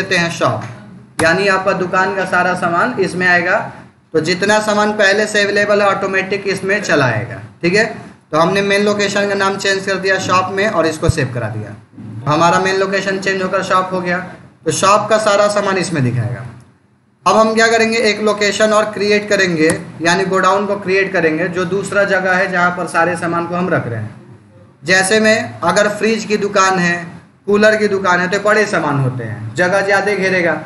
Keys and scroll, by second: 1.0 Return, 10.5 ctrl+a, 16.3 Escape, 17.8 Up, 19.5 Return.